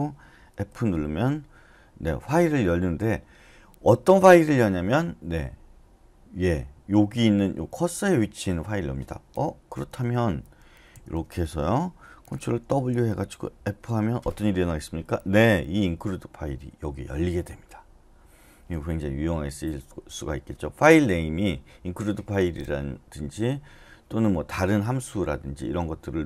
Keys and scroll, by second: 0.5 typing, 10.9 Up, 10.9 Left, 11.1 Left, 11.3 Left, 11.5 Left, 12.6 ctrl+w, 13.8 f.